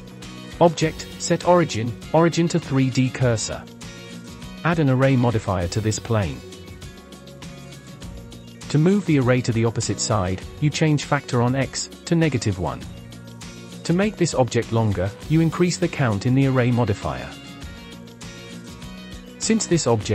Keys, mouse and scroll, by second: 0.3-3.3 drag, 5.2 click, 7.4-8.5 drag, 11.6-13.3 drag, 14.6 click, 15.2-15.7 scroll down 10, 16.5-17.5 drag, 17.5-18.1 scroll up 2, 19.1-20.1 shift+middle drag.